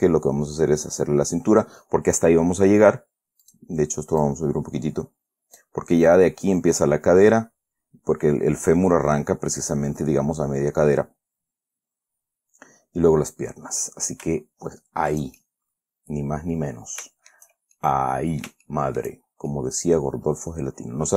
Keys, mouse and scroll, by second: 3.8 click, 4.6-6.1 drag, 13.8-14.2 scroll up 2, 14.3 scroll down 2, 15.7-17.1 shift+middle drag, 17.1 shift+click, 17.5 shift+middle click, 18.1 shift+middle click, 18.3-21.1 drag.